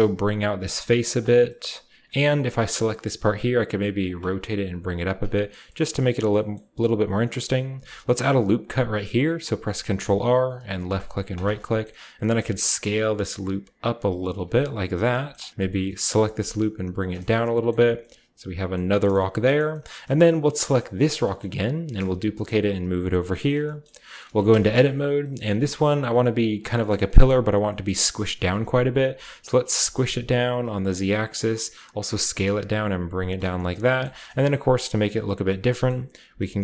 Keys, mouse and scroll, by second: 0.4-0.7 scroll down 1, 0.7-1.1 scroll up 1, 1.1-2.6 drag, 1.3-2.6 scroll down 1, 3.1-4.1 shift+middle drag, 3.1 shift+scroll down 1, 3.1 typing, 4.1-7.1 drag, 4.1 typing, 5.5-6.1 scroll down 1, 6.1-7.1 scroll up 1, 6.3-9.9 middle drag, 7.1-9.9 scroll up 1, 7.7 ctrl+r, 10.8-12.4 drag, 11.2-12.4 right drag, 11.5 middle click, 12.3 s, 12.9-14.1 scroll up 1, 14.1-15.5 drag, 14.1 scroll up 1, 14.4-15.3 scroll down 1, 14.5 Tab, 14.9 Tab, 15.5 g, 15.6-17.2 scroll up 1, 17.0 click, 17.1 Tab, 17.2-18.7 drag, 17.7 a, 19.1 shift+middle drag, 21.0-22.3 middle drag, 21.9 shift+d, 23.3 shift+click, 24.2-26.7 scroll up 1, 24.3 Tab, 25.4 Tab, 25.7-26.7 middle drag, 25.8 Tab, 26.7 scroll up 1, 27.1 a, 27.3 a, 28.2-29.7 shift+middle drag, 29.7-31.0 typing, 30.8 click, 31.9 click, 32.4 typing, 33.1-33.6 drag, 33.3 Tab, 33.6-34.0 typing, 34.4-35.8 shift+scroll up 1, 35.8 shift+scroll down 1, 35.9 middle click, 36.2 z.